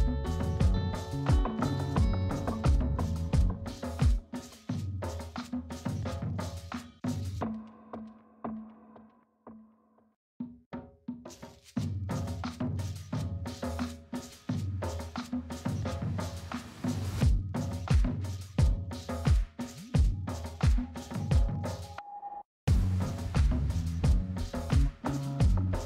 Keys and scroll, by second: 1.0 space.